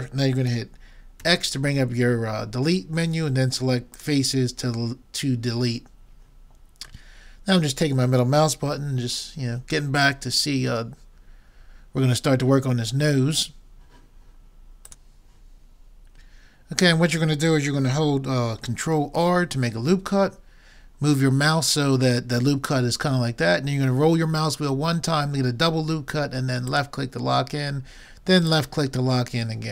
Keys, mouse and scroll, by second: 1.2 x, 7.1 middle click, 19.2 ctrl+r.